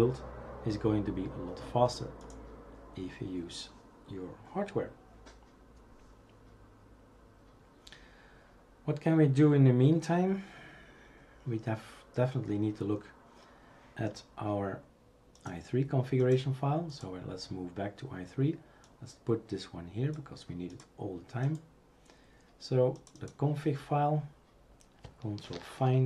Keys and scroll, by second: 25.5 ctrl+f.